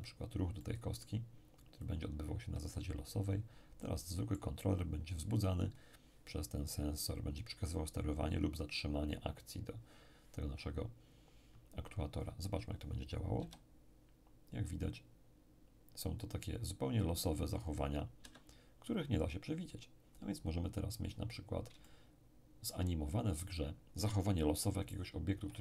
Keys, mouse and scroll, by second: 0.5-5.3 middle drag, 1.8-5.3 drag, 13.4 p, 18.2 Escape, 20.1 click, 21.4-21.8 scroll down 1, 21.8-23.6 shift+middle drag, 25.3 p.